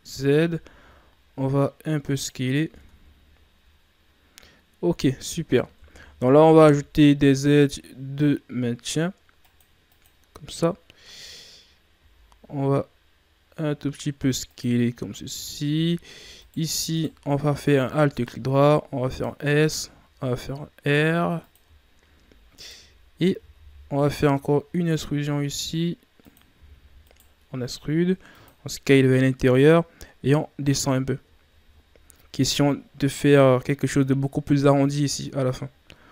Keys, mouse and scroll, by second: 2.5 scroll down 3, 2.7 Tab, 3.2-4.1 scroll down 2, 4.1-4.4 scroll up 5, 5.5 Tab, 6.0-6.5 scroll up 1, 6.5 ctrl+r, 16.9 right click, 17.6 alt+right click, 18.4 s, 19.6 r, 21.8-22.5 shift+scroll down 1, 22.5 alt+right click, 23.3 e, 26.5 e, 28.4 s, 29.5-30.8 drag, 30.8-31.4 scroll down 6, 31.4-31.8 scroll up 1, 31.8 scroll down 1, 32.0-34.6 scroll up 4, 34.6-36.1 scroll up 4.